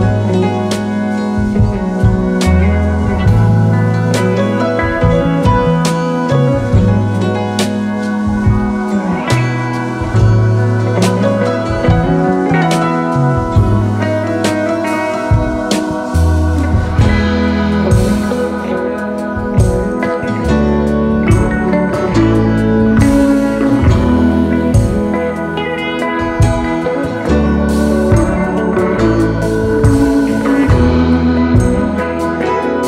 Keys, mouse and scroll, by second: 1.8-2.8 typing, 7.4 ctrl+a, 7.5-8.6 typing, 10.5-11.1 scroll up 2, 11.1 alt+scroll up 2, 15.0-15.7 alt+scroll down 1, 20.9 ctrl+a, 21.1-24.1 ctrl+scroll down 10, 25.2 ctrl+a, 26.5 double click, 28.6 ctrl+a, 29.1-31.6 scroll down 15, 31.6-32.3 scroll down 2, 32.3 scroll down 1.